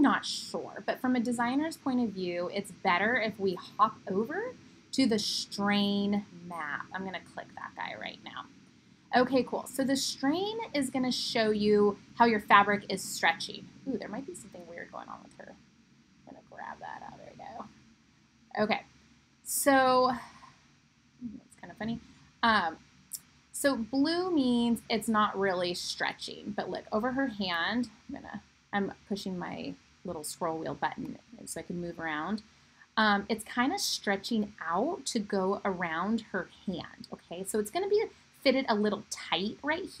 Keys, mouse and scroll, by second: 19.9 middle click, 20.1 middle click, 20.5 middle click, 20.6 middle click, 21.0 middle click, 21.4-40.0 middle drag.